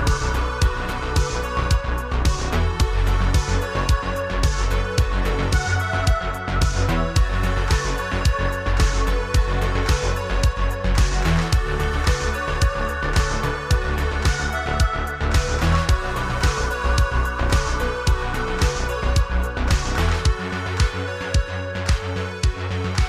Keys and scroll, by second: 2.0 e, 2.8 s, 4.1 e, 10.3 ctrl+r, 13.3 ctrl+b, 17.3 e, 17.8 alt+s, 19.8 s, 20.7 z.